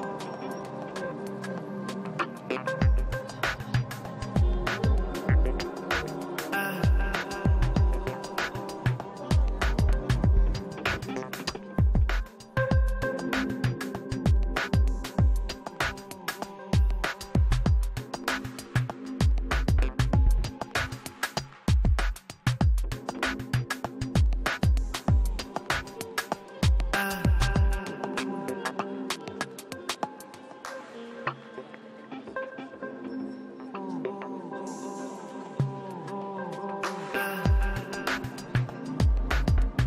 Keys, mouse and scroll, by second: 0.1 f, 0.5-2.1 drag, 1.0 ctrl+z, 2.5 middle click, 2.8 click, 3.5 middle click, 3.8 click, 4.8-6.2 middle drag, 5.9 click, 6.9-9.3 middle drag, 7.3 click, 8.8 click, 9.4 middle click, 9.7 click, 10.2-11.5 middle drag, 10.9 click, 11.6 middle click, 12.0 click, 12.9-14.8 middle drag, 14.5 click, 15.4-16.5 drag, 16.5-17.5 middle drag, 17.5 click, 18.2 middle click, 18.7 click, 19.7-21.0 middle drag, 20.5 click, 21.9 middle click, 22.5-23.7 drag, 23.7-24.7 middle drag, 24.2 click, 25.6-26.6 middle drag, 26.3 n, 27.1-29.0 drag, 28.3 n, 28.5-30.8 middle drag, 29.2 click, 30.2-32.0 drag, 31.7-33.4 middle drag, 32.8-34.1 drag, 34.5 middle click, 35.0 click, 35.6 middle click, 36.2 click, 36.9-38.1 middle drag, 37.5 click, 38.4 middle click, 38.6 click, 39.5 click.